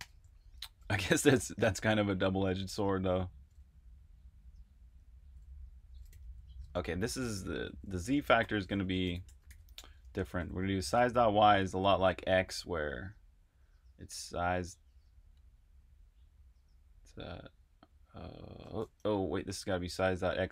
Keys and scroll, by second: 0.0-1.4 typing, 4.9-10.9 typing, 18.8 Escape, 18.9-20.5 typing.